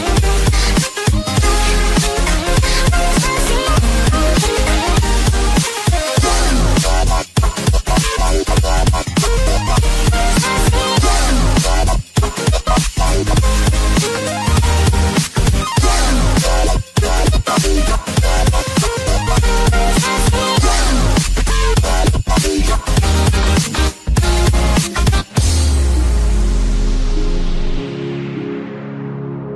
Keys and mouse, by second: 1.5 click, 3.5 u, 4.5 shift+Page_Down, 5.3 shift+Page_Down, 6.6 shift+Page_Down, 8.3 click, 9.7 click, 9.7 KP_0, 10.2 shift+Tab, 10.2 click, 10.2 KP_0, 11.9 click, 11.9 KP_0, 13.3 KP_0, 13.5 Return, 17.1 click, 17.9 KP_1, 18.1 KP_0, 18.4 Return, 19.1 Return, 19.1 KP_0, 19.1 KP_1, 23.4 click, 25.8 space, 28.0 click.